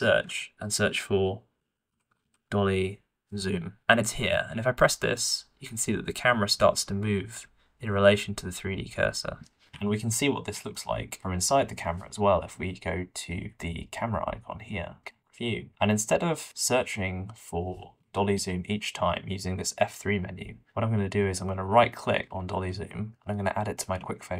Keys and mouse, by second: 0.0 F3, 2.1 l, 10.7-11.1 shift+middle drag, 15.1 middle click, 18.0 F3.